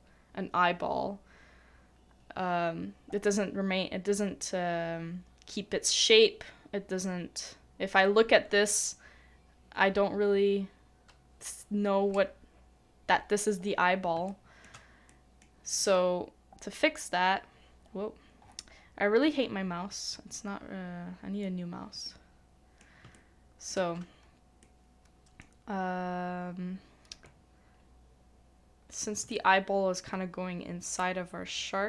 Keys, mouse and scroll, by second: 14.1 middle click, 14.3 shift+middle click, 16.2-16.6 scroll up 1, 16.6 scroll down 1, 16.6-17.0 scroll up 1, 17.0 scroll down 1, 17.0-17.4 scroll up 1, 17.4-17.9 scroll down 1, 17.9-18.4 scroll up 1, 18.4-19.4 scroll down 1, 22.0 middle click, 23.1 shift+middle click, 29.2 middle click, 29.3 shift+middle click.